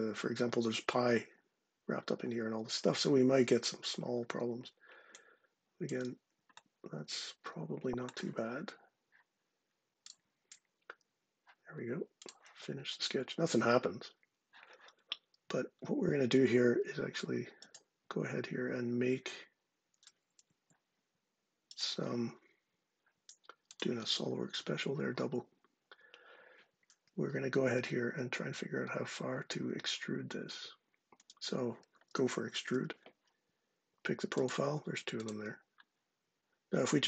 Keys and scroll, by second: 19.9 ↻, 32.3 e.